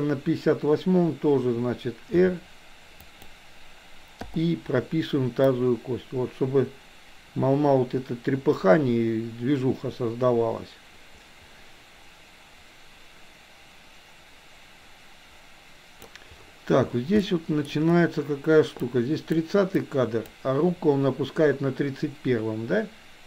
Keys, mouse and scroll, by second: 2.1 r, 4.2 i, 5.6-16.1 drag, 17.3 middle click, 18.8 click, 19.7 click.